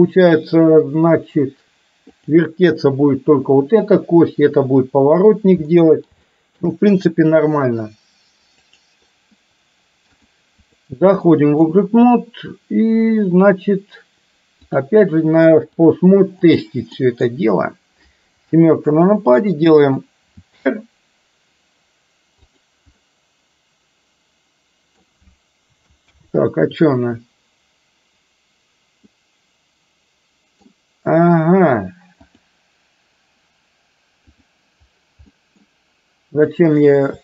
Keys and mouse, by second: 2.3 click, 5.8 middle click, 6.3 shift+middle click, 8.6 click, 10.3 click, 11.4 middle click, 14.8 click, 15.9 click, 17.0 middle drag, 18.5 KP_7, 20.5 r, 23.0-25.1 middle drag, 26.3 ctrl+z, 29.1-30.8 middle drag, 32.4-34.6 drag, 35.4 middle click, 36.8 click.